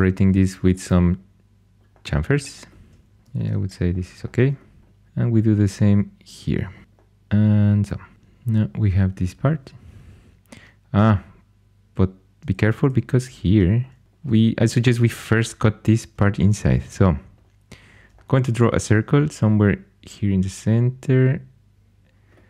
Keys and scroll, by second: 3.2 shift+super+e, 3.3 shift+super+e, 12.5 super+z, 12.8 super+z, 13.2 super+z.